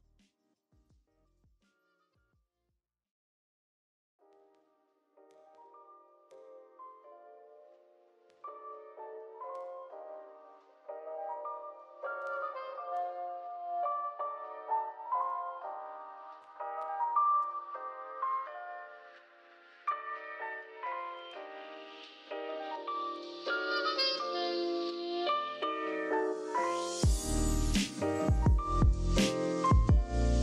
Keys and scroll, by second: 2.2 z, 2.5 v, 10.5-12.2 typing, 22.6 z, 23.0 v, 24.1-25.0 typing, 28.8 i, 29.5 v.